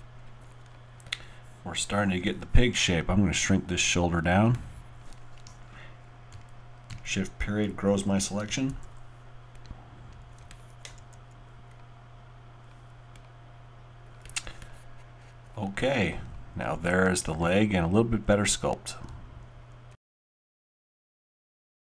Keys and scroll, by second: 6.3-8.7 typing, 11.0 alt+w, 12.4 alt+w.